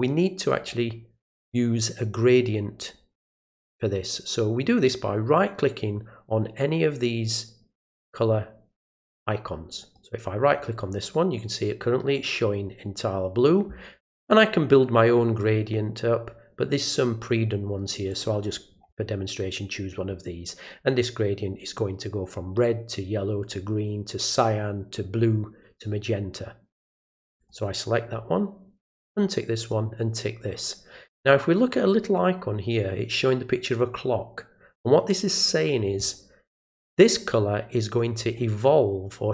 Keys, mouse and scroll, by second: 9.8 right click, 18.1 click, 27.4 click, 29.0 click, 29.6 click.